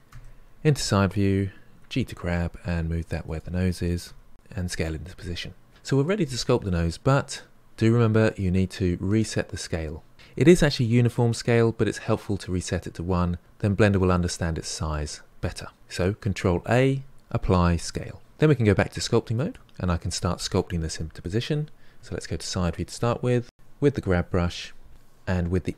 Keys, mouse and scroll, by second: 0.1 KP_3, 1.8 g, 5.0 s, 16.6 ctrl+a, 19.3 click, 21.2 KP_3, 21.9-24.0 ctrl+middle drag, 24.0-25.1 drag, 25.4 click.